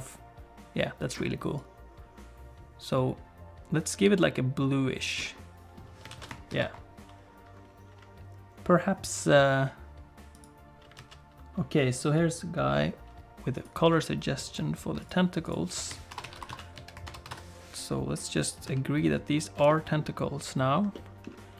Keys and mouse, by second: 6.1 alt+a, 6.5 ctrl+s, 10.3 click, 11.0 alt+a, 13.5 click, 14.5 click, 15.2-17.9 drag, 18.7 click, 19.7 shift+middle click, 20.9 middle click.